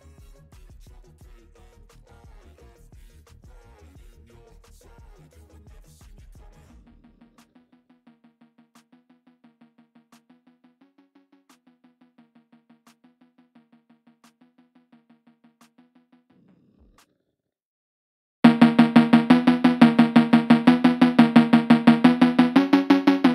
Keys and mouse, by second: 4.2 ctrl+i, 16.6 b, 17.8 b, 18.8 b, 19.5 b, 21.5 b, 22.5 b, 23.1 b.